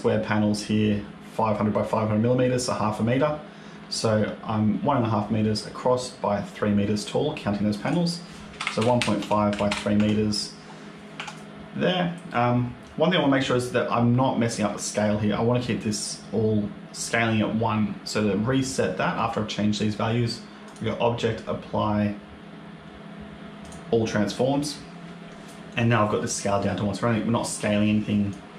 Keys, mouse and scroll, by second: 7.7 click, 9.8 Tab, 11.0 Tab, 20.5 click, 28.2 click.